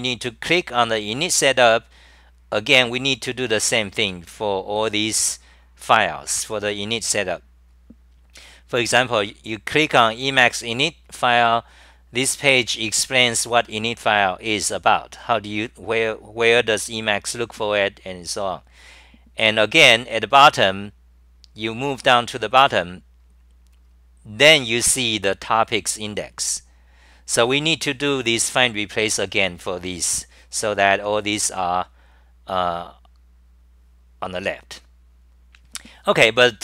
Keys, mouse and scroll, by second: 21.0-24.6 typing, 36.5-36.6 typing.